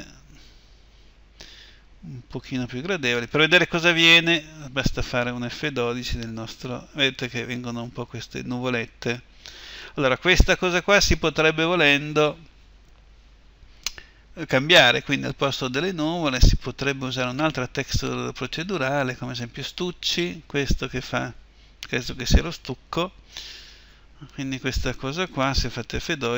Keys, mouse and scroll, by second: 10.3 Escape.